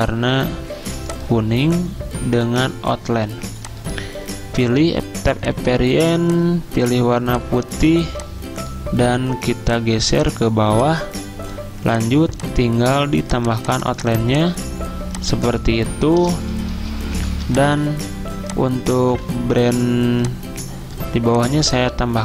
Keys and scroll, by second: 17.1-19.1 typing.